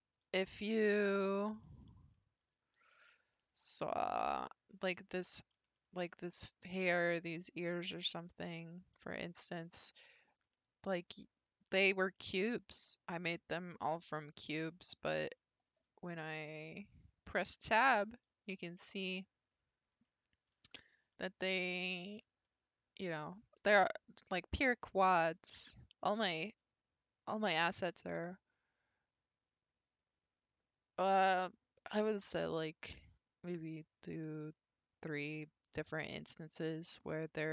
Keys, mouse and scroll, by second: 0.3 shift+scroll up 1, 0.5-1.3 shift+middle drag, 1.3-1.8 scroll down 6, 1.8-2.2 shift+middle drag, 2.2 scroll down 1, 2.4 Tab, 2.9-4.3 middle drag, 4.3-5.1 scroll up 10, 5.1-5.7 scroll down 4, 5.7-6.3 shift+middle drag, 6.3-7.5 scroll down 1, 7.5-8.1 middle drag, 8.1-8.6 scroll up 1, 8.6 click, 9.2-10.4 shift+middle drag, 10.4 scroll up 1, 10.5 scroll down 1, 10.5-11.1 middle drag, 11.1 scroll up 1, 17.8 Tab, 18.7-19.2 scroll up 2, 19.2-19.7 scroll down 2, 20.0-25.5 middle drag, 26.6 1.